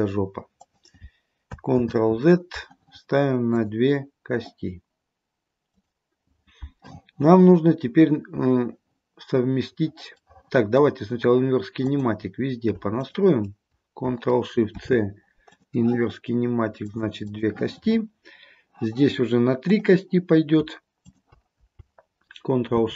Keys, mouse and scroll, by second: 1.9 ctrl+z, 3.6 click, 5.8 click, 8.3-8.8 scroll up 1, 10.4 middle click, 10.8 middle click, 11.1 scroll down 1, 12.0 click, 13.0 shift+click, 14.7 ctrl+shift+c, 17.0 click, 17.3 click, 18.2-19.8 scroll down 1, 19.8 click, 21.1 shift+click, 22.8 ctrl+shift+c.